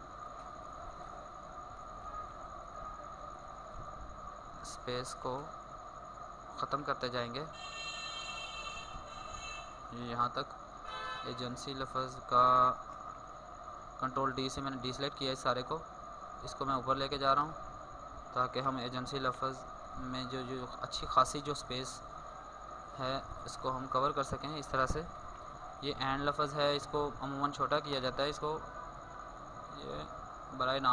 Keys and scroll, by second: 9.6 ctrl+d, 11.7 ctrl+s, 12.9 ctrl+d, 24.8 ctrl+d, 30.1 ctrl+t.